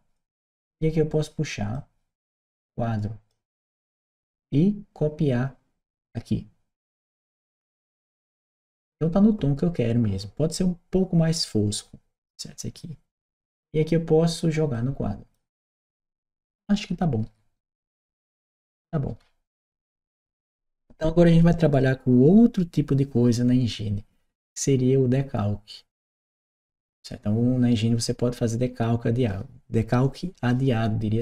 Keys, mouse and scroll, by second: 1.5-3.1 drag, 6.7 click, 7.7-9.0 drag, 14.5 click, 15.7-20.2 right drag.